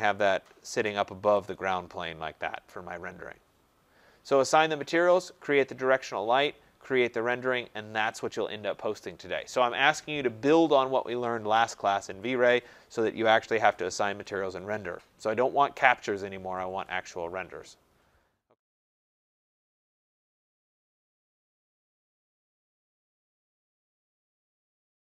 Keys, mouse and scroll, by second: 0.4 click, 1.4 click, 1.9 middle click, 1.9-3.1 scroll, 1.9 typing, 6.9 middle click.